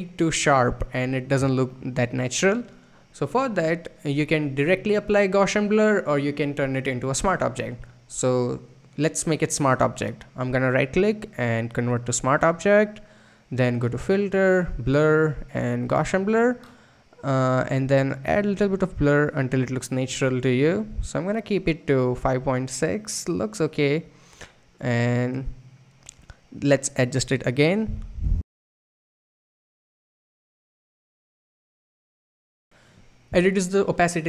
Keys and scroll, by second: 28.2 Right.